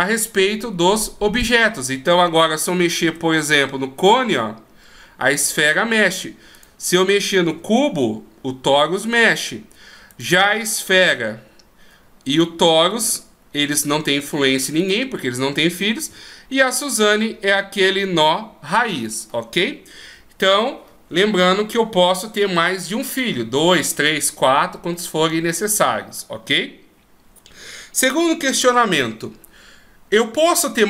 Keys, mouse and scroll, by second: 1.4 right click, 3.0 r, 7.5 r, 10.1 right click, 10.9 g, 12.3 right click, 13.0 g, 14.8 right click, 16.1 g.